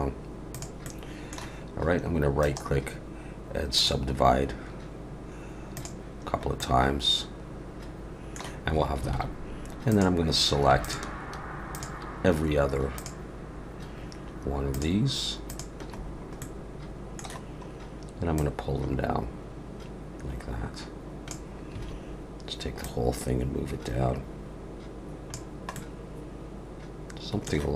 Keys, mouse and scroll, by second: 0.8 middle click, 2.4 right click, 5.7 click, 6.3 scroll up 3, 6.6 middle click, 9.1 alt+a, 9.9 click, 10.8 shift+click, 11.7 click, 12.9 shift+click, 14.7 shift+click, 15.5 shift+click, 16.0 scroll down 3, 16.4 middle click, 17.4-18.3 scroll down 1, 18.3 click, 21.7 a, 22.8 click, 25.7 middle click.